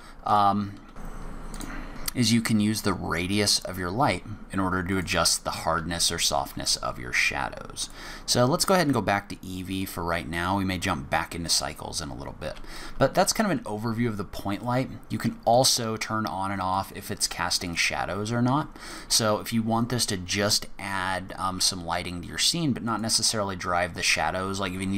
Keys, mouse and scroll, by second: 0.2 click, 1.0 click, 1.3 click, 4.9 click, 5.7 g, 8.7 click, 9.7 click, 10.3 click, 12.4 g, 15.5 click, 16.7 click, 17.6 click, 18.8 click, 22.8 click.